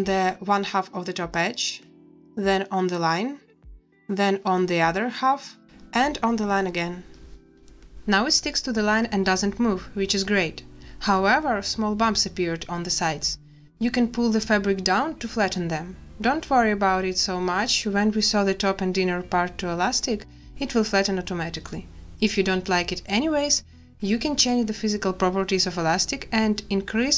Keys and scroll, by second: 8.2 space.